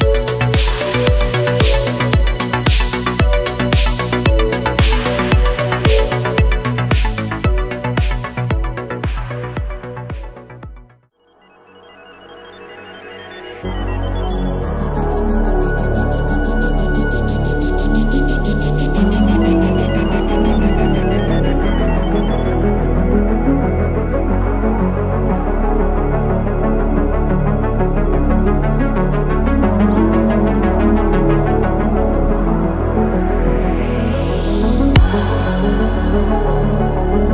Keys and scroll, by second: 0.3 ctrl+z, 0.6 ctrl+z, 1.2 ctrl+z, 9.4 ctrl+z, 10.7 ctrl+z, 11.0 ctrl+z, 13.6 ctrl+z, 17.2 ctrl+z, 28.7 ctrl+z, 30.7 ctrl+z, 33.4 ctrl+z, 33.8 space, 35.4 ctrl+z, 36.2 ctrl+z.